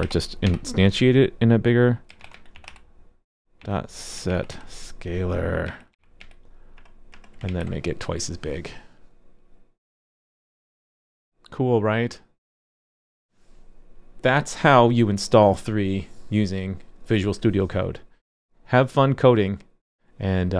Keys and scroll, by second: 7.5 super+s.